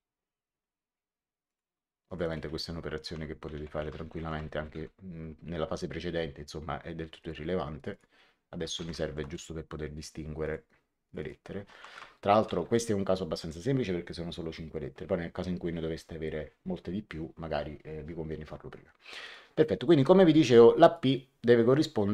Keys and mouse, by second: 1.4 click, 3.6 Home, 3.9 shift+End, 4.1 shift+t, 4.5 KP_2, 4.6 Return, 7.1 click, 8.5-9.5 typing, 10.3 click, 11.8 shift+t, 12.4 KP_2, 12.5 Return, 12.5 KP_Enter, 19.2 click, 20.8 click.